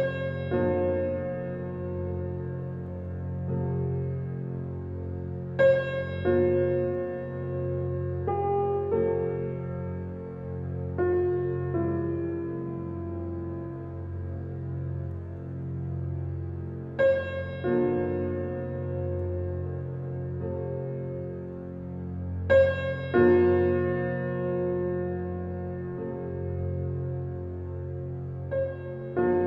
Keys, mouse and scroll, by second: 0.0 click, 2.8 ctrl+alt+KP_0, 5.6 n, 7.5 click, 8.3 click, 9.0-16.1 middle drag, 16.1 click, 17.5 n, 21.0 click, 21.9 click, 22.9 click, 23.3-25.8 right drag, 25.8 click, 28.1-28.7 scroll down 1, 28.7 click.